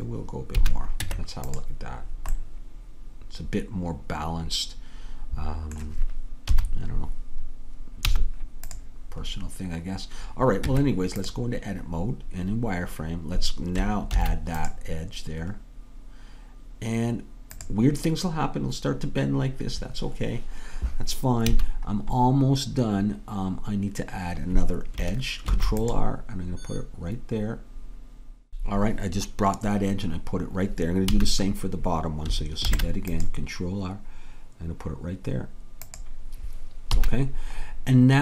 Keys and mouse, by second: 0.6 a, 1.0 Tab, 6.5 KP_3, 8.1 z, 10.7 Tab, 14.2 ctrl+r, 21.5 a, 25.6 ctrl+r, 31.2 a, 32.7 ctrl+r, 37.0 a.